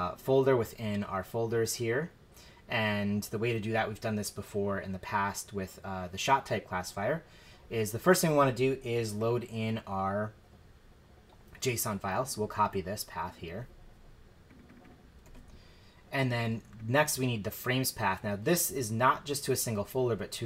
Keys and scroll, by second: 15.2 super+v.